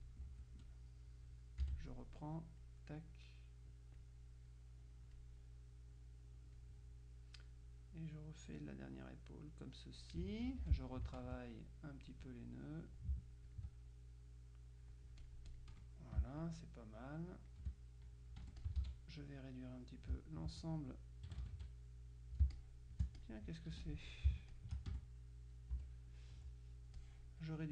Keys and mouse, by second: 0.3 Escape, 0.6 F2, 0.7 click, 1.7 F6, 2.5 click, 8.0-10.6 drag, 10.7 F2, 11.3 ctrl+click, 12.6 click, 13.6 ctrl+click, 15.3 click, 16.3 space, 16.5-18.1 drag, 18.5 F1, 18.7 ctrl+click, 19.3 ctrl+a, 21.4 KP_Subtract, 21.5 click, 22.5 space, 22.6-24.5 drag, 23.8 F2, 24.6 shift+click, 25.0 shift+F1, 25.8 Insert, 26.7 Delete, 27.1 click.